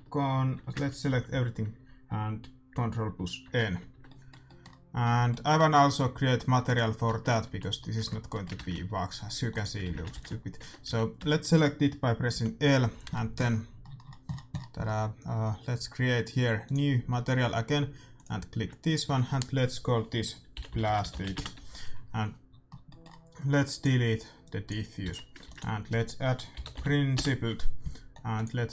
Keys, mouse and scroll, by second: 1.0 a, 1.2 a, 3.4 ctrl+n, 3.9 Tab, 3.9-6.8 middle drag, 6.1 a, 6.8 right click, 7.0 Tab, 7.4 a, 7.9 Tab, 8.4-9.6 middle drag, 8.6 shift+z, 9.6 click, 9.9 shift+z, 10.1 ctrl+s, 10.5 Tab, 10.5 click, 11.3 a, 11.4 middle click, 12.3 l, 13.1-15.4 middle drag, 16.6-20.7 drag, 23.6-26.2 drag, 25.0 x, 25.4 shift+a.